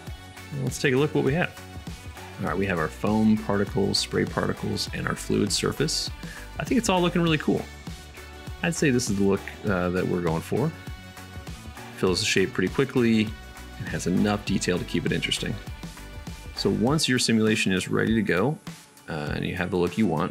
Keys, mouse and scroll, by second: 2.2-6.6 middle drag, 6.6-8.9 drag, 8.9-20.3 middle drag.